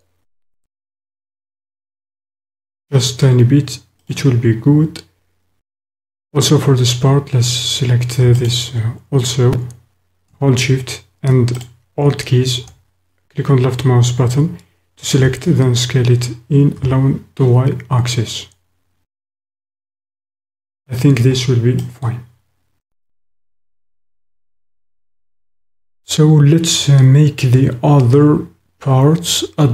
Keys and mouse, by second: 4.1 click, 11.5 alt+shift+click, 20.5-21.9 drag, 21.9 middle click, 22.7 click, 24.4 middle click.